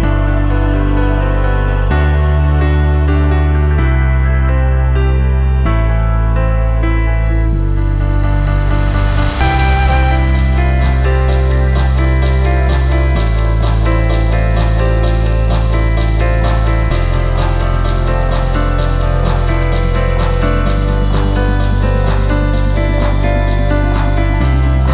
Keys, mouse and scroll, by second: 2.9-8.8 drag, 9.0 scroll up 1, 9.3 alt+click, 9.7 alt+middle click, 10.0-10.4 scroll up 3, 10.5 alt+click, 10.9 scroll up 2, 11.2 alt+middle click, 11.7-12.5 scroll down 4, 12.6 alt+middle click, 13.0 scroll down 2, 13.2 alt+click, 13.5 alt+click, 14.0 shift+right click, 14.9 shift+middle click, 14.9-15.2 shift+scroll up 2, 15.2 alt+click, 15.9 alt+click, 16.5 shift+right click, 17.4 alt+click, 17.7 alt+middle click, 18.0-18.4 scroll up 3, 18.4 scroll down 1, 18.6 alt+click, 18.9 alt+middle click, 19.9 click, 20.6 click, 21.7 click, 21.8 double click, 23.9-24.9 typing.